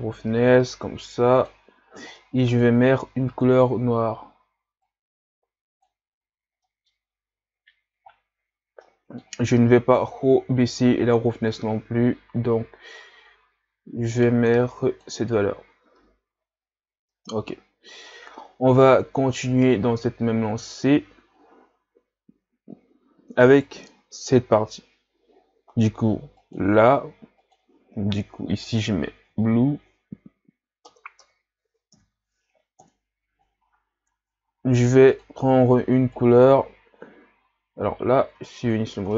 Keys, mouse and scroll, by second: 5.5-6.7 drag, 6.7 middle click, 7.1-7.4 scroll up 4, 10.2-14.1 drag, 15.6 a, 17.3-19.1 middle drag, 19.1-19.8 scroll down 2, 23.5-24.3 right drag, 26.6-32.9 drag, 32.9 BackSpace, 36.2 click, 38.3 ctrl+z.